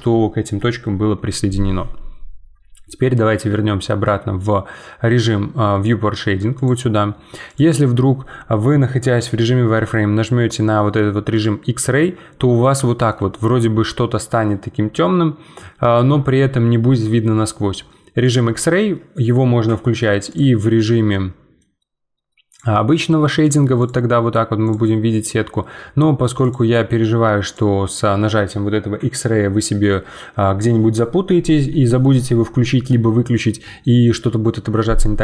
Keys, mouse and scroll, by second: 6.6-9.8 drag, 11.3-12.8 drag, 12.8 shift+middle click, 13.3 scroll up 2, 18.2-21.1 drag, 21.1-22.5 middle drag, 22.5-30.4 drag.